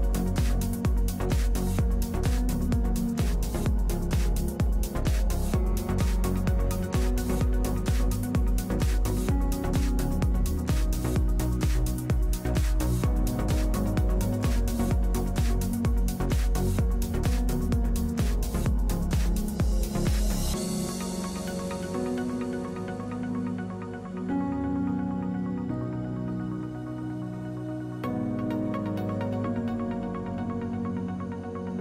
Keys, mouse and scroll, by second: 0.7 n, 1.4-3.1 middle drag, 1.7 w, 3.1-5.2 drag, 5.4 ctrl+3, 6.8 click, 7.6 middle click, 8.5-11.3 drag, 8.5 n, 13.7 n, 15.5-18.8 middle drag, 19.6 2, 19.9 f.